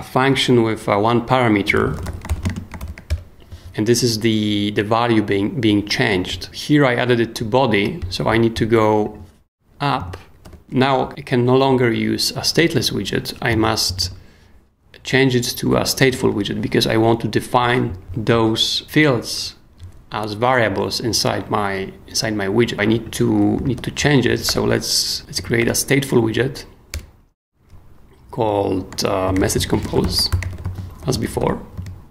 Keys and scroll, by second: 1.5-3.3 typing, 4.0 Return, 10.4 super+o, 13.9 super+d, 16.0 k, 17.0 k, 23.3-26.1 typing, 26.9 Return, 29.0-31.9 typing.